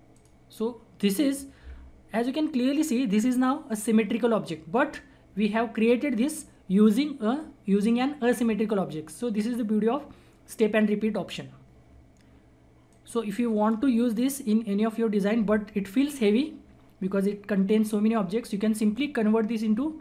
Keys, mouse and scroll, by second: 0.1 click, 0.5 scroll down 1, 2.2-4.0 scroll up 1, 11.2-12.9 scroll down 1, 12.9-14.2 drag, 14.2-15.4 scroll up 1, 19.4 click.